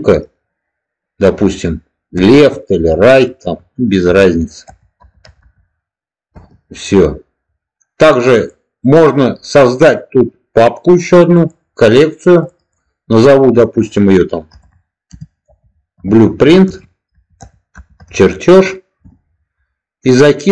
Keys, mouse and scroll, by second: 11.2 click, 12.3 click, 12.4-19.6 drag.